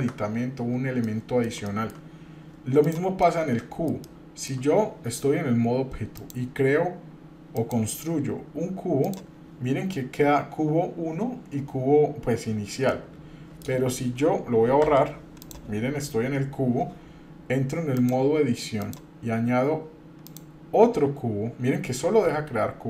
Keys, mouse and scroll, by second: 1.0 middle click, 1.7 shift+middle click, 2.8 click, 3.2-4.5 middle drag, 6.2-9.2 drag, 12.9-13.6 middle drag, 14.8 Delete, 15.4 click, 17.9-19.0 drag, 20.3-22.8 drag.